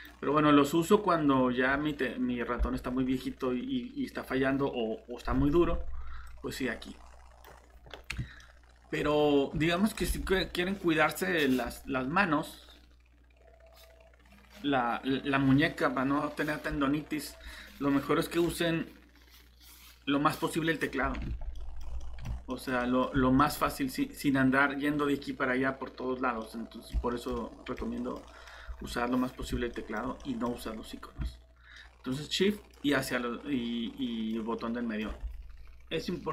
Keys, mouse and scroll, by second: 8.4 middle click, 8.7 typing, 30.0-30.5 typing, 31.7 typing, 34.9 typing.